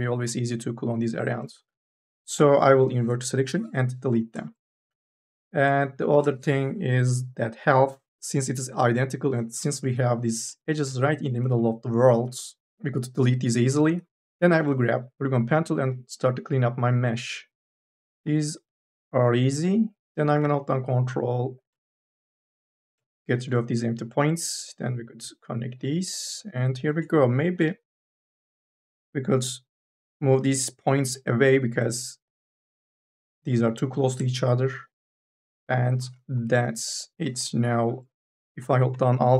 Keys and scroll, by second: 1.6 3, 2.6 u, 3.0 i, 3.1 Delete, 3.9 4, 5.8 1, 6.0 space, 9.8 2, 14.1 1, 27.4 m, 27.8 o, 36.2 2, 36.7 e, 37.5 4.